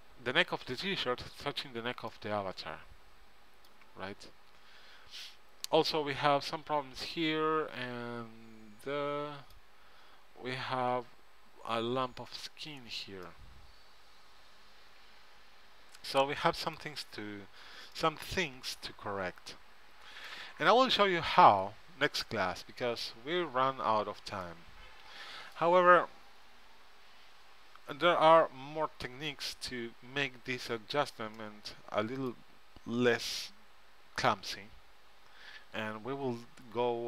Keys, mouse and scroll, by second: 3.5-4.8 middle drag, 9.1 middle click, 14.6 middle click, 19.2 middle click, 20.8 middle click, 25.6 middle click, 33.0 middle click.